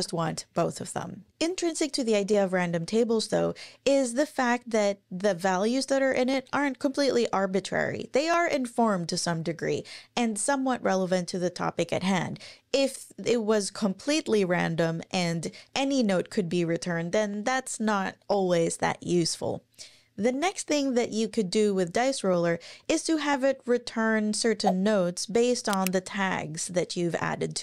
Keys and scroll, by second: 0.1 Up, 1.2 super+`.